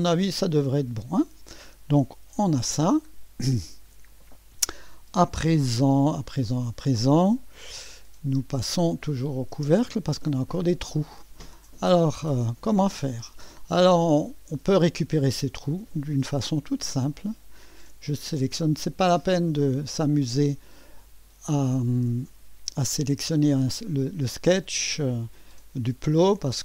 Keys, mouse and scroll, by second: 0.0-2.2 scroll down 2, 2.2 2, 2.8 scroll down 1, 3.1-3.4 scroll up 1, 3.4 click, 5.9 right click, 7.6 click, 9.3 click, 9.5 space, 10.1 click, 11.7 middle click, 12.6-14.1 scroll up 1, 14.1 click, 17.1 click.